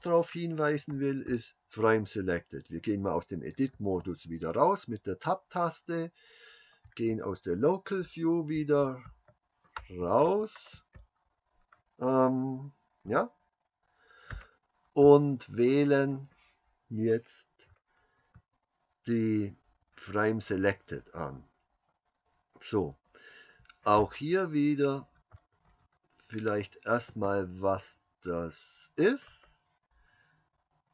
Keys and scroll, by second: 3.8 Tab, 6.8 \, 8.6 \, 13.7 KP_Divide.